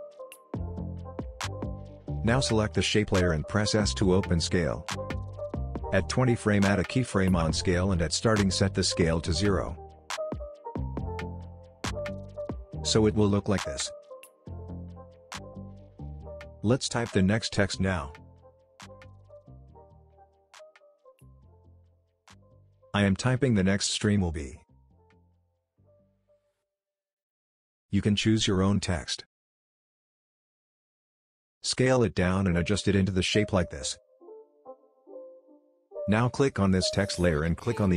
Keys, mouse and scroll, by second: 2.6 s, 4.7-6.3 drag, 10.8-11.4 click, 12.7 Return, 13.7-15.8 drag, 16.3 right click, 16.7 click, 20.1 shift+t, 20.6 shift+j, 21.0 shift+e, 22.3 shift+e, 22.5 shift+space, 23.5-26.0 typing, 26.8 click, 29.5 ctrl+z, 30.3 s, 31.0-32.8 drag, 33.1 alt+scroll up 1, 33.6-35.1 drag, 35.3 Down, 35.6-37.9 drag.